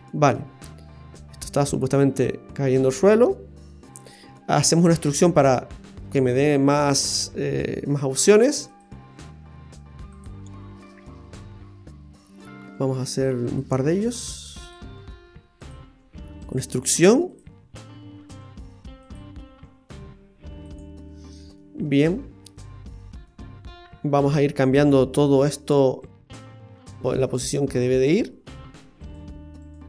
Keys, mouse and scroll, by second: 5.0 e, 9.0 e, 12.6 e, 13.8 e, 14.9 e, 15.9 e, 16.7 e, 18.2 e, 19.4 e, 21.1-21.6 scroll down 2, 21.6 middle click, 22.8-23.1 scroll up 1, 23.2 middle click, 26.0 right click, 26.5 shift+right click.